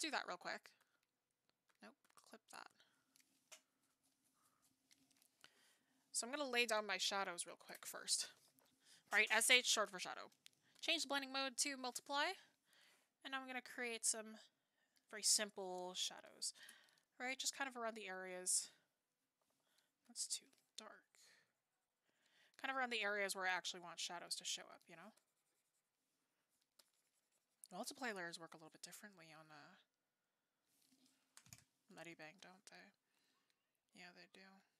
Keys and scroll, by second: 19.4 ctrl+z.